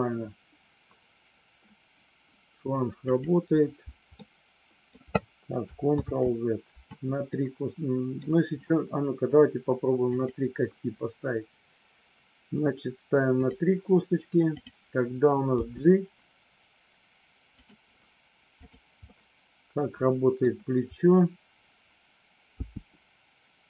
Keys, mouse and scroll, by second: 3.0 click, 4.2 middle click, 6.0 ctrl+z, 7.3 middle click, 10.2 click, 13.3 click, 14.5 click, 15.5 g, 17.5 click, 19.3-20.4 middle drag, 22.5 g.